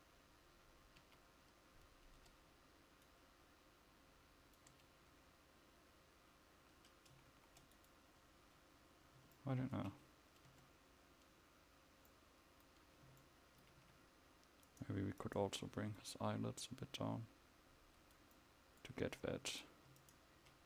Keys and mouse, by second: 0.0 Tab, 1.1 a, 2.3 Tab, 4.6-7.4 drag, 4.8 Tab, 7.4 ctrl+s, 10.6 Tab, 13.9 a, 17.4 click.